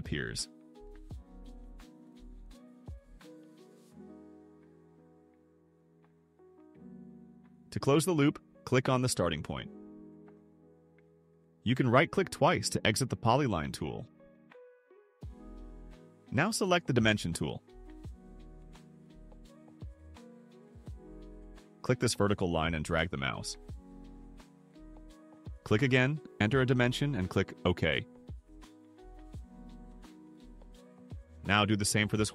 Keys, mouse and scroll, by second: 0.2 click, 1.3 click, 2.3 click, 3.7 click, 5.3 click, 6.7 click, 9.8 click, 12.5 right click, 13.7 right click, 20.2 click, 22.0 click, 24.2 click, 26.5 1, 27.0 5, 27.5 0, 28.5 Return, 32.1 click.